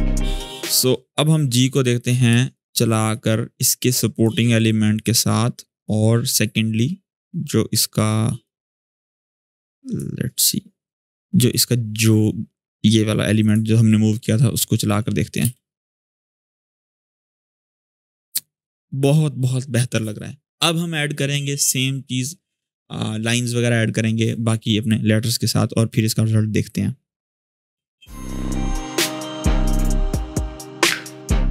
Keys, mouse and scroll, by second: 2.0 click, 3.2-4.1 click, 6.4-8.3 drag, 9.7-10.0 drag, 14.0 alt+scroll down 1, 14.6-15.2 click, 15.2 space, 19.9 click, 27.5-28.2 click, 29.9 ctrl+d, 30.0-30.4 click, 31.2-31.5 scroll up 1.